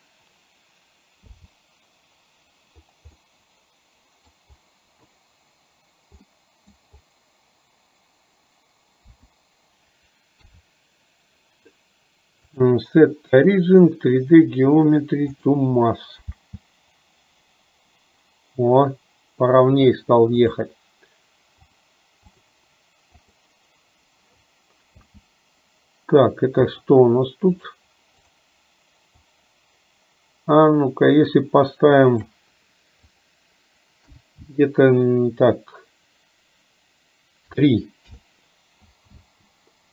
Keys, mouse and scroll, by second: 3.3-4.4 middle drag, 6.3 middle click, 12.7-15.5 drag, 20.5 click, 21.8-23.4 drag, 26.7 click, 27.6-38.3 drag.